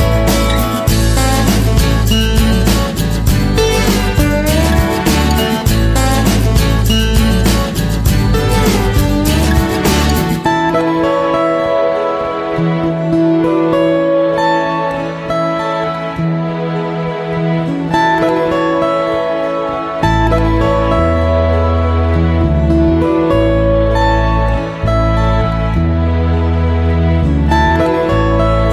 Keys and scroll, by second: 23.8 p, 27.6 ctrl+0.